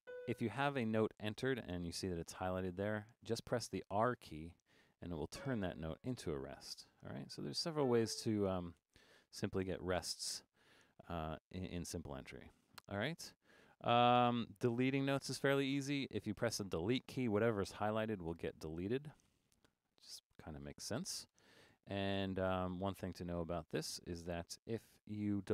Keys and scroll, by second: 3.9 r, 6.3 r, 8.8 r, 18.3-24.9 typing.